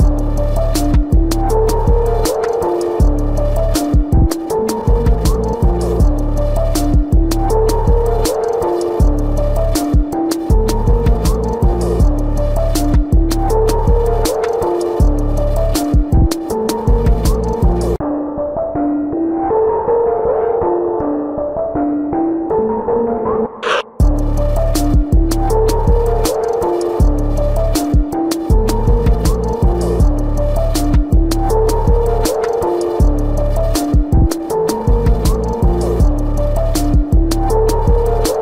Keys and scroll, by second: 0.1 ctrl+=, 1.5 ctrl+-, 3.4 ctrl+-, 4.1 ctrl+-, 5.6 ], 8.4 space, 12.1 ], 13.5 ctrl+alt+z, 17.9 ctrl+-, 26.1 space.